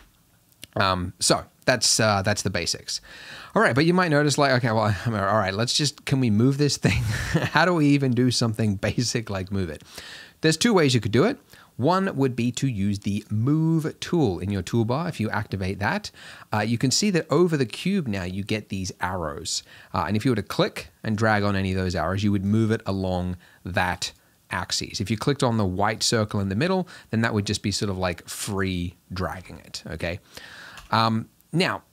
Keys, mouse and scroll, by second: 3.6 click, 4.2 click, 4.8 click, 5.0 click, 5.6 click, 5.9 click, 6.2 click, 7.0 click, 13.3-16.7 drag, 20.1-22.5 drag, 23.0-24.2 drag, 26.2-27.9 drag.